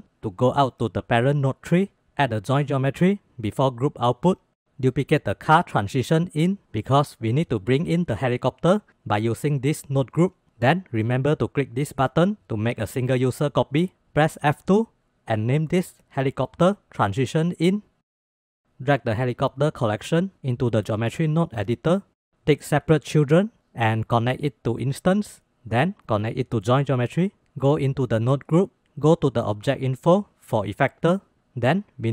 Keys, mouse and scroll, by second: 1.8 shift+a, 5.1 click, 5.5 shift+d, 8.8-10.4 drag, 11.7 click, 14.5 F2, 15.8 shift+Right, 16.0 shift+Right, 19.5 click, 20.3-21.4 drag, 21.8-22.3 middle drag, 23.0 click, 25.6-26.9 drag, 29.2 click, 30.0-31.1 drag.